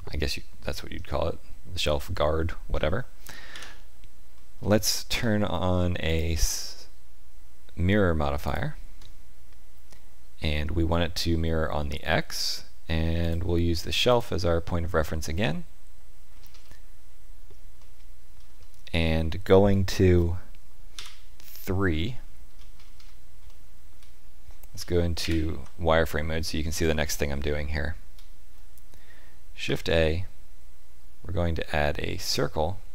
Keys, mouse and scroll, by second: 3.5 KP_1, 4.7 shift+middle click, 4.8 shift+middle click, 6.0 click, 13.2 click, 16.4 scroll up 2, 17.5 scroll up 1, 17.8 shift+middle click, 20.9 KP_3, 22.0 shift+middle click, 22.7-23.5 scroll up 5, 23.5 shift+middle click, 24.7 z, 26.7 scroll up 2, 27.4 shift+middle click, 29.6 shift+a.